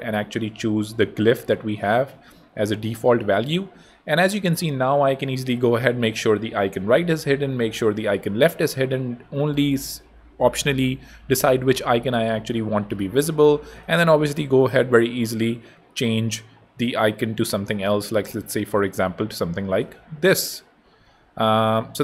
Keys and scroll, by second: 0.6 super+a, 0.8 super+v, 20.1 super+v, 20.2 super+a, 20.7 super+v, 21.0 super+Tab, 21.8 Tab.